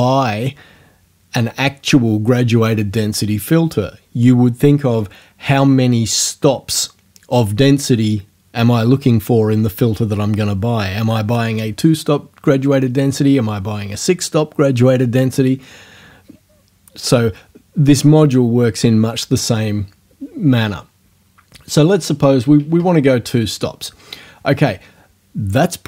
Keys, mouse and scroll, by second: 21.8 right click, 22.6 KP_2, 22.8 KP_Enter.